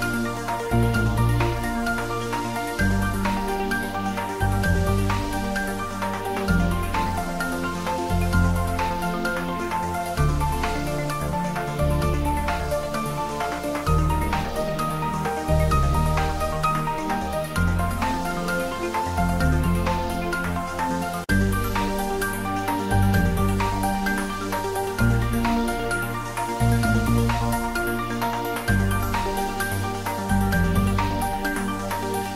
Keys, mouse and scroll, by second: 0.4 r, 1.4 click, 1.8 g, 2.8 click, 3.0 scroll up 1, 3.3 middle click, 4.4-5.3 scroll up 1, 7.0 scroll down 1, 7.8-8.1 scroll, 11.9 scroll down 1, 12.7 click, 12.9 click, 13.8 s, 14.3 click, 14.7 g, 15.3 click, 15.6-16.1 scroll up 1, 16.4 click, 17.9 5, 18.1 Return, 22.8 click, 23.2 scroll down 1, 24.1 r, 24.2 r, 25.6 click, 26.8 scroll up 1, 27.1 middle click, 27.7 scroll up 1, 29.6-30.1 scroll down 1, 30.1 click, 30.8 g.